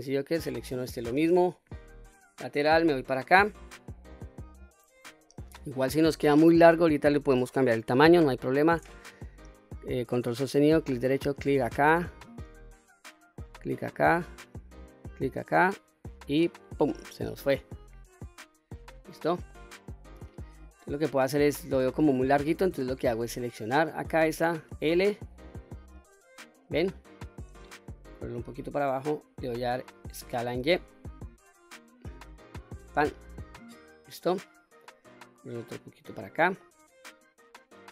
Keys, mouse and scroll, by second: 0.4 click, 1.7 KP_3, 2.9 shift+middle click, 3.7-4.2 scroll up 3, 4.4 shift+scroll up 1, 4.5 shift+middle click, 5.3 scroll up 2, 11.0 ctrl+right click, 13.3 ctrl+right click, 14.8 ctrl+right click, 16.4 ctrl+right click, 17.3-18.4 scroll down 5, 18.4-19.0 middle drag, 19.5-20.8 middle drag, 21.8-22.5 scroll up 1, 22.5 scroll up 1, 22.7-23.0 shift+middle drag, 23.5 click, 24.6 l, 25.5-26.4 middle drag, 28.1 click, 30.2 s, 30.6 y, 32.6 click, 33.0-33.6 scroll down 2, 33.4-34.1 middle drag, 35.3 click, 36.6-37.8 middle drag.